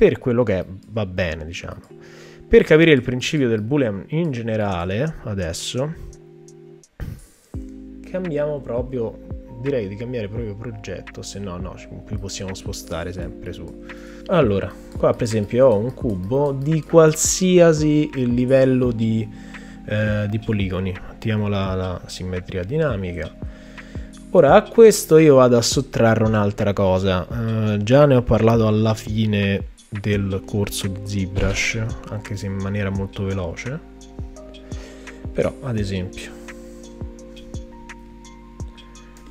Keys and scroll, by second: 39.2 w.